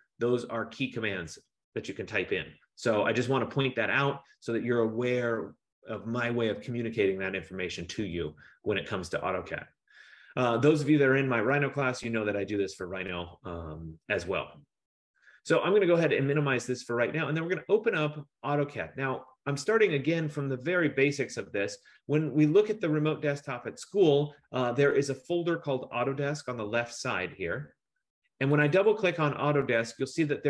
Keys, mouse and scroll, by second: 16.5 click, 28.7 click, 28.9 click.